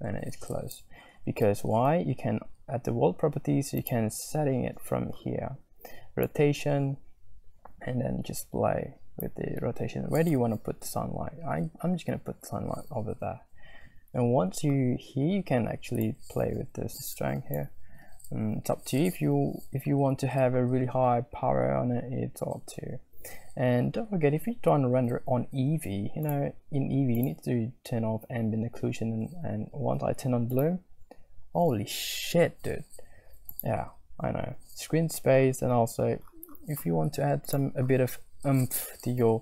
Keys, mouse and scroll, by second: 3.8 click, 6.3-9.7 drag, 16.2 shift+middle click, 16.9 shift+middle click, 26.6 click, 27.4 click, 30.9-33.9 drag, 37.6 click.